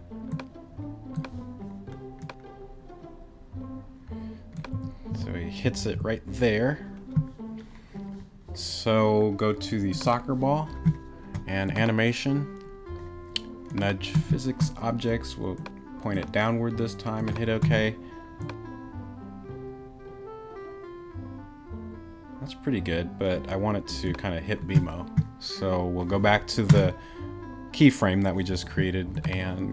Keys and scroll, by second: 4.7 Right, 5.6 Left, 5.9 Right.